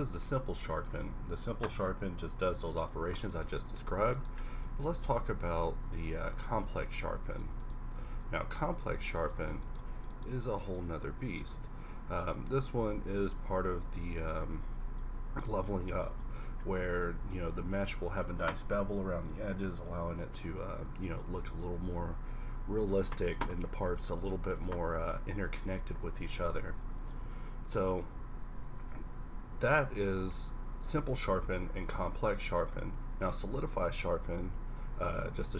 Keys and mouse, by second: 0.5 Tab, 3.9 Tab, 4.6 Tab, 5.0 Tab, 5.3 q, 8.1 Tab, 12.0 q, 12.8 q, 14.8 Tab, 23.5-24.6 middle drag, 24.6 a, 25.6 middle click, 26.1-27.0 middle drag, 28.5 1, 29.2 2, 30.0 q, 34.0 2, 34.4 3, 35.0 shift+c, 35.3 shift+a.